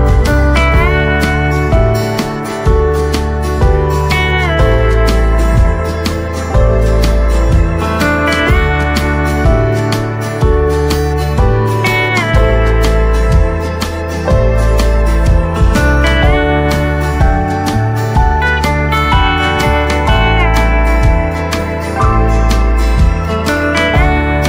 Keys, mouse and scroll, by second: 0.9 click, 3.3 right click, 4.7 click, 7.3 shift+right click, 7.7 click, 8.2 scroll down 1, 8.5 click, 11.4 m, 12.3 right click, 13.5 click, 14.5 Return, 19.1-21.6 drag, 21.6 scroll up 1, 22.4 click.